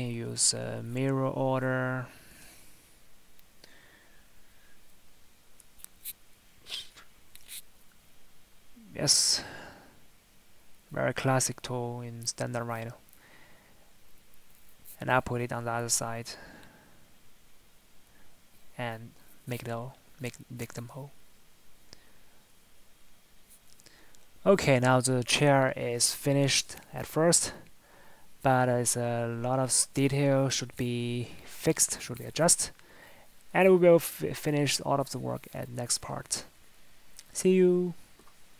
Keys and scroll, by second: 20.9 Tab.